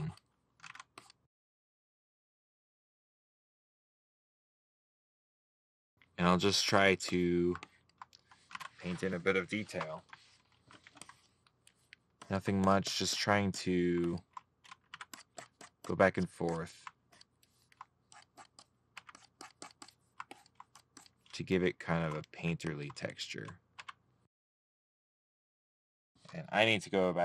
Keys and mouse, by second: 3.0 middle click, 5.9 middle click, 13.5 middle click, 19.3 middle click, 23.4 right click, 24.4 middle click.